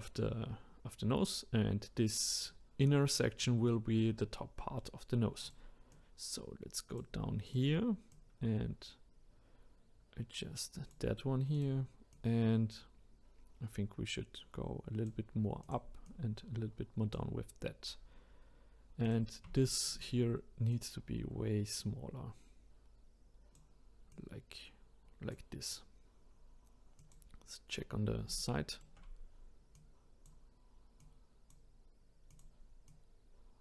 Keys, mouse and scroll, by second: 5.4 click, 5.9 click, 7.5 click, 11.5 click, 12.1 click, 15.6 click, 16.0 click, 18.0-19.0 scroll down 1, 19.0 click, 19.6-20.7 shift+middle drag, 20.7 click, 24.1-27.1 drag, 27.8-28.4 scroll down 1, 28.4-29.7 shift+middle drag, 29.7-31.1 drag, 32.3 click, 32.9 click.